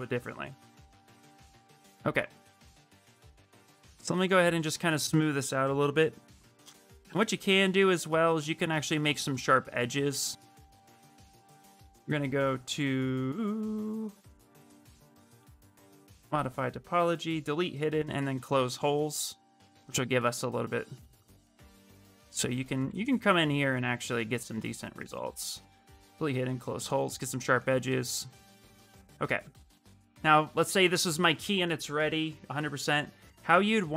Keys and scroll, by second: 18.3 shift+f, 18.7 shift+f, 21.2 ctrl+shift+space.